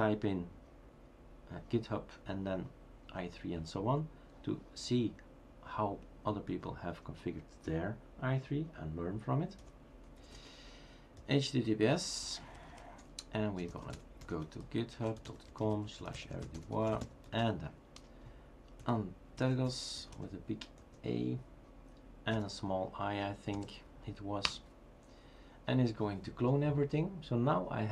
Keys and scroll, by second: 9.6-10.8 typing, 13.6-17.9 typing, 19.1-20.8 typing, 22.4 i, 23.6 3.